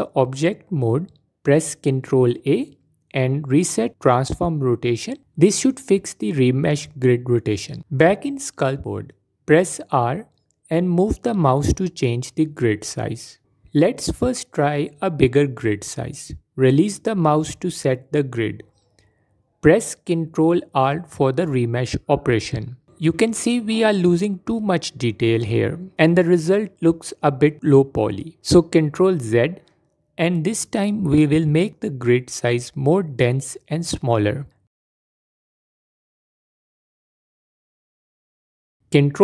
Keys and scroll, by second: 0.1 ctrl+a, 8.1 Tab, 11.1 shift+r, 20.4 ctrl+r, 23.5 F4, 24.5 F4, 27.0 ctrl+z, 29.4 shift+r.